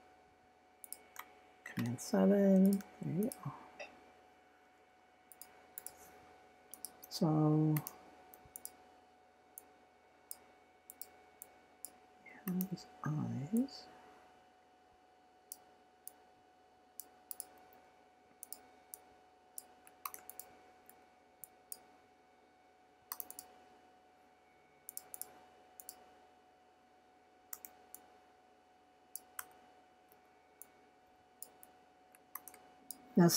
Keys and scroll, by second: 7.7 v, 20.0 shift+c, 30.1 v.